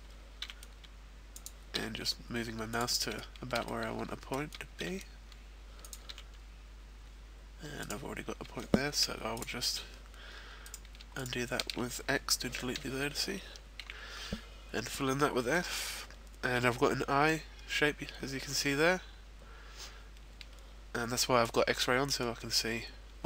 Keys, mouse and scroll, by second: 1.4 click, 1.4 e, 1.8 e, 2.8 click, 3.1 shift+middle click, 3.6 middle click, 5.0 e, 5.9 click, 6.2 e, 7.9 right click, 9.0 x, 10.6 right click, 11.1 shift+right click, 13.0 f, 13.3-14.3 scroll down 2, 13.8 a, 15.1 middle click, 22.2 middle click.